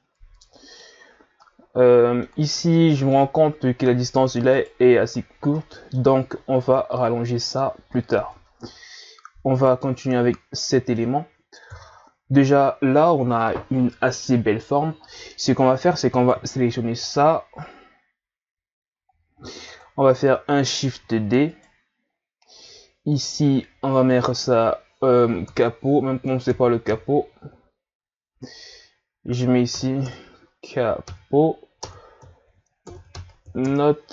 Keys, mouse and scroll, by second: 0.1-0.5 scroll up 1, 0.5-4.5 middle drag, 4.5 right click, 5.5-6.2 middle drag, 6.2-6.6 scroll up 1, 6.6 Tab, 8.3 Tab, 8.6-9.6 middle drag, 9.6 right click, 10.0-11.7 middle drag, 11.7 KP_1, 12.2 a, 16.2 right click, 19.1-20.8 drag, 20.8 shift+d, 24.1 click, 24.3-27.2 drag, 30.0 BackSpace.